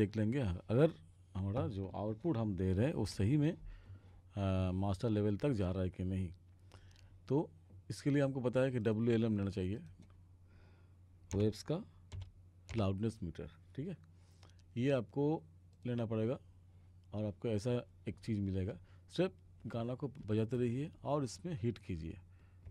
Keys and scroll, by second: 11.4 w, 12.2 l, 12.8 m.